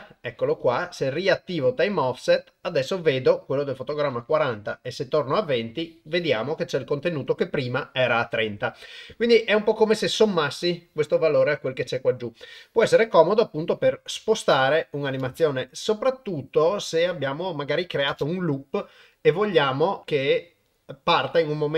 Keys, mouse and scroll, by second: 4.3-5.4 drag, 14.2-14.9 drag, 15.2 shift+space, 18.1 shift+space.